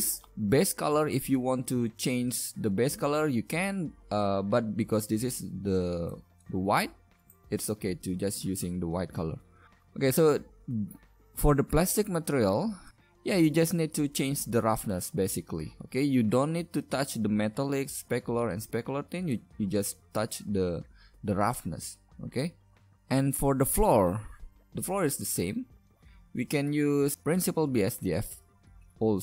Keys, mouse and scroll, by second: 24.5-26.4 right drag, 26.4 a, 27.1 g.